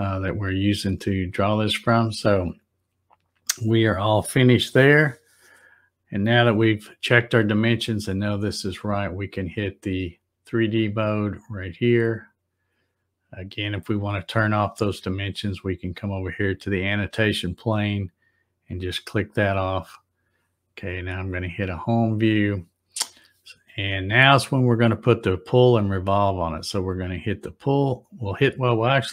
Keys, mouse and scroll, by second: 11.6 click, 18.3 click, 21.3 click, 28.3 click.